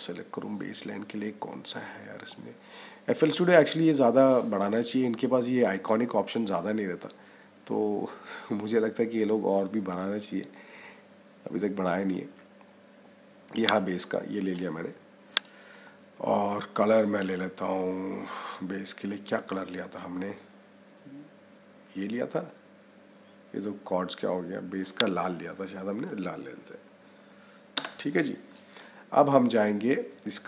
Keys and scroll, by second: 27.6 Return.